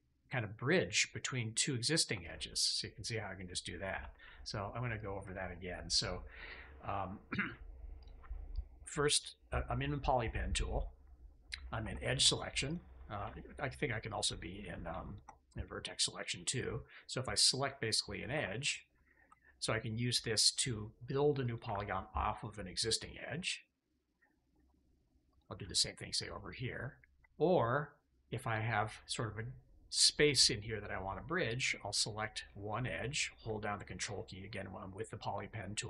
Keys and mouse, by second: 1.8 ctrl+click, 2.9 click, 3.8 a, 4.8 click, 5.2 shift+click, 7.9 click, 11.7 2, 12.6 click, 13.1 1, 14.0 click, 15.0 shift+click, 18.2 2, 20.3 ctrl+click, 21.3 ctrl+click, 26.1 ctrl+click, 26.9 ctrl+click, 27.5 click.